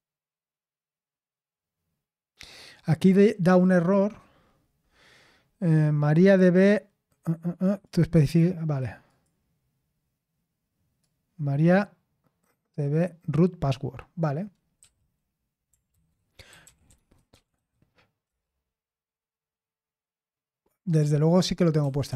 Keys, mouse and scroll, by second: 6.1-7.9 drag, 8.3 click, 9.1 click, 11.0-13.3 drag, 14.8 q, 15.9 ctrl+c, 16.3-18.1 typing, 18.3 Return, 21.9-22.1 typing.